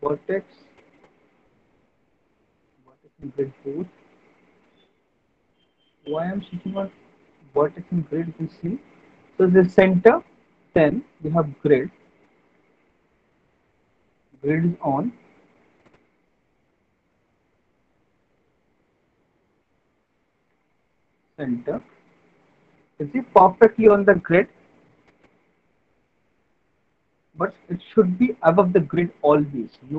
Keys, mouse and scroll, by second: 0.2 click, 2.0 click, 2.5 click, 3.3 click, 3.9 alt+middle click, 4.3 middle click, 4.6 middle click, 4.7 alt+middle click, 7.4 click, 8.2 alt+middle click, 8.7 middle click, 9.3 alt+middle click, 10.1 middle click, 10.6 alt+middle click, 11.8 alt+middle click, 12.5 alt+middle click, 13.5 click, 15.6 alt+middle click, 16.0 middle click, 16.2 middle click, 16.4 alt+middle click, 18.3 click, 18.9-20.0 alt+middle click, 19.3 middle click, 19.5 middle click, 19.7 alt+middle click, 19.9 middle click, 20.5 alt+middle click, 21.0 middle click, 21.1 middle click, 23.6 alt+middle click, 26.7 alt+middle click, 28.6 alt+middle click.